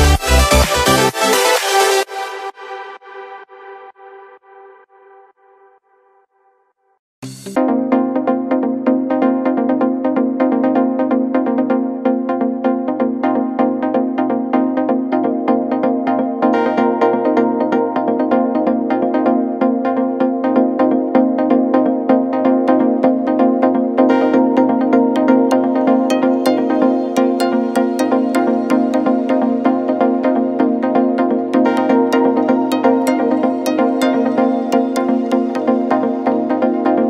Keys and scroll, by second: 0.8 space, 5.2 ctrl+-, 5.9 ctrl+=, 7.5 ctrl+-, 13.3 ctrl+=, 14.3 ctrl+=, 29.0 ctrl+-, 29.3 space, 29.5 ctrl+=, 32.0 ctrl+-, 33.6 ctrl+z.